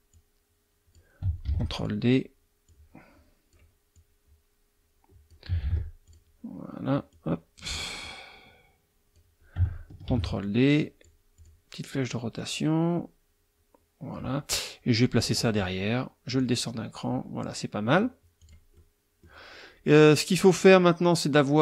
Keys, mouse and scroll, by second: 0.1-1.1 drag, 1.5 ctrl+d, 1.8 ctrl+click, 2.7-3.7 drag, 3.9-5.5 drag, 5.6 ctrl+d, 6.0 ctrl+click, 7.1-7.8 drag, 8.0-9.4 drag, 10.1 ctrl+d, 10.4-11.2 ctrl+drag, 11.4 click, 12.4-14.3 drag, 14.5-15.4 drag, 16.3 click, 18.4 click, 18.7 middle click.